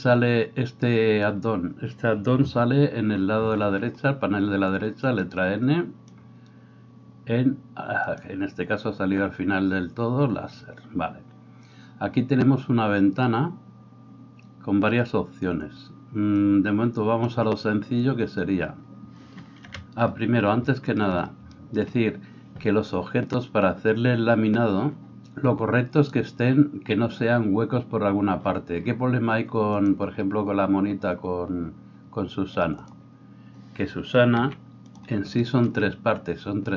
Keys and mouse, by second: 0.0-8.2 drag, 3.0 n, 16.3-35.0 drag, 19.7 KP_1, 21.1 middle click, 34.5 g, 35.0-36.7 shift+middle drag.